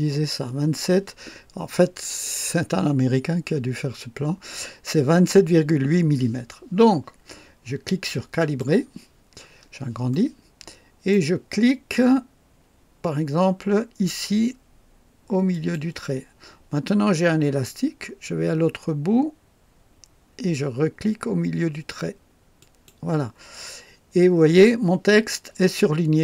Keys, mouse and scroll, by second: 8.4 click, 9.3-9.6 scroll up 3, 10.1 right click, 15.5 click, 22.6 click.